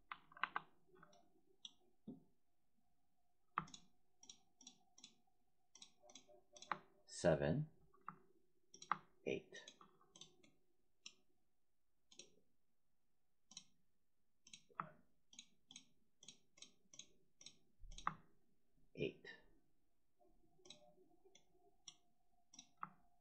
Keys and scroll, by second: 0.3 5.